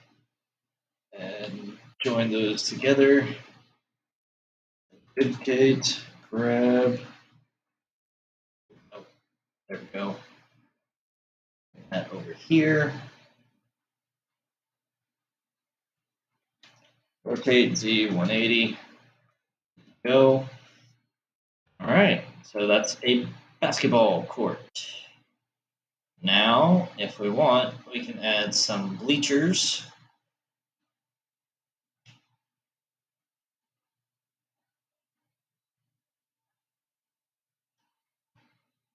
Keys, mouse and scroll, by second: 2.3-3.2 ctrl+j, 3.6 ctrl+j, 5.4 shift+d, 17.4 r, 24.4-27.9 middle drag, 27.9-30.2 scroll down 3, 30.2 click, 32.7 Tab, 33.9 click, 37.0-38.5 scroll up 5, 38.5-38.9 shift+middle drag.